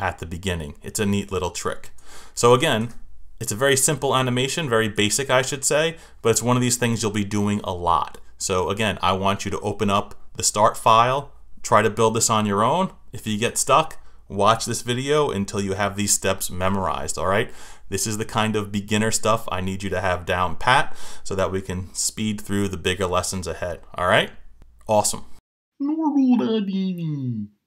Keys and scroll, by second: 2.4 Return, 4.9 Return.